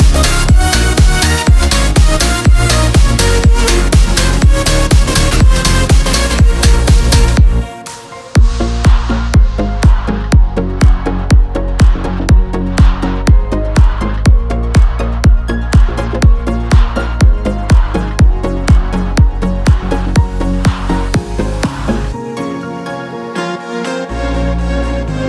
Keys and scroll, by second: 1.0 ctrl+s, 6.3 ctrl+alt+shift+e.